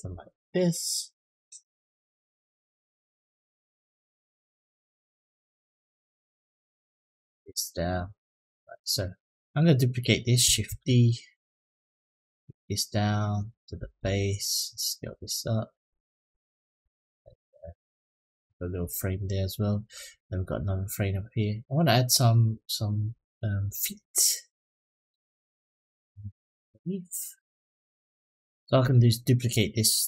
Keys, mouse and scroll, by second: 5.6 click, 6.5-7.7 drag, 8.0 click, 8.4 middle click, 9.2 click, 10.5 shift+d, 11.3-13.2 drag, 13.5 s, 16.9 click, 17.3-19.7 middle drag, 20.2-21.2 middle drag, 23.1 middle drag, 24.1-24.4 middle drag, 24.8 click, 25.3-25.8 middle drag, 26.1-26.4 middle drag, 26.8-28.4 middle drag, 28.6 click.